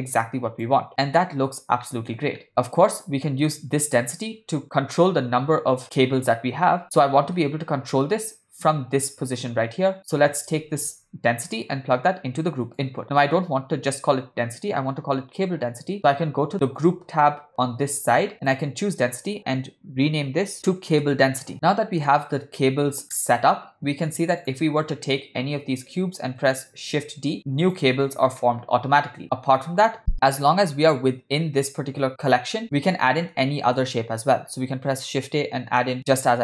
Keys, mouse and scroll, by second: 0.9 ctrl+scroll up 1, 1.1 scroll down 1, 1.2 shift+middle click, 1.7 scroll down 1, 1.9-2.2 middle drag, 2.5-3.6 ctrl+shift+middle drag, 2.5 scroll up 1, 4.3-6.8 drag, 7.1 middle click, 11.5-12.8 drag, 16.8 click, 18.6-23.0 drag, 23.2-24.1 middle drag, 24.4 click, 26.8 shift+d, 28.4-29.2 middle drag, 30.0 x, 32.6 shift+middle click, 33.2 ctrl+middle click, 33.8 shift+a.